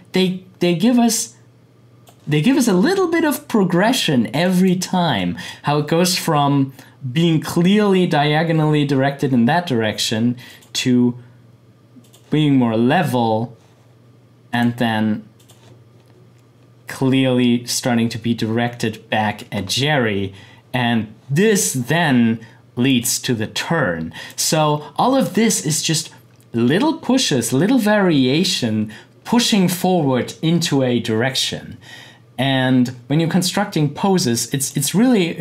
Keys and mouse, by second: 10.4 click, 22.8 click, 34.6-35.4 drag.